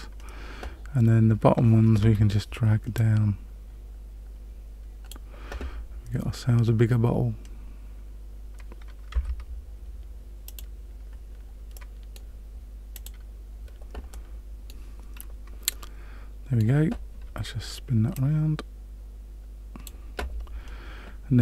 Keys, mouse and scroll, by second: 2.9 click, 9.1 Tab, 10.4 click, 11.7 middle click, 13.0 click, 14.1 middle click, 15.1-15.7 scroll down 1, 15.7 middle click, 18.1 click, 19.8 click.